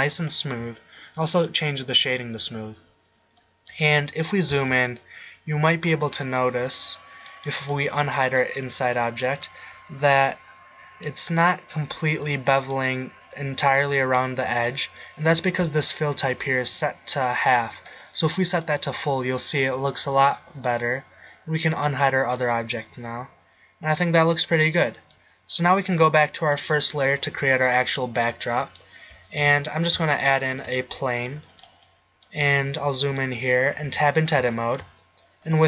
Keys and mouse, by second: 3.6 middle click, 4.2-5.4 middle drag, 5.7 middle click, 5.9 middle click, 6.1 middle click, 6.6-7.2 middle drag, 8.0-8.7 middle drag, 8.7 h, 20.0-24.4 middle drag, 26.4-28.3 drag, 28.3 middle drag, 29.4 KP_1, 30.6 shift+a, 33.8 Tab.